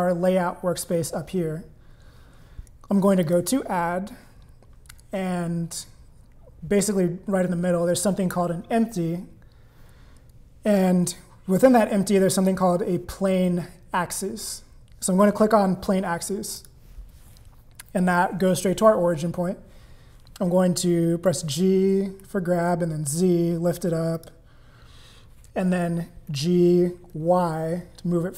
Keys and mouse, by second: 0.0 click, 3.2-16.7 drag, 21.3 g, 28.0 g.